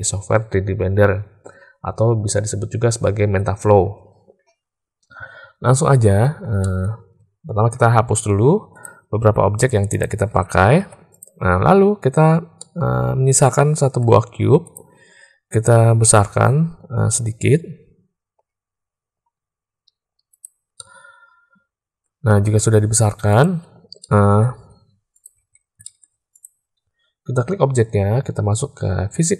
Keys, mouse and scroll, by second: 6.5 shift+middle click, 10.7 x, 12.5-14.0 drag, 14.7 click, 16.0 s, 20.7-22.0 middle drag, 22.4 s, 23.9-24.4 drag, 24.5 s, 25.3 alt+a, 25.8 shift+click.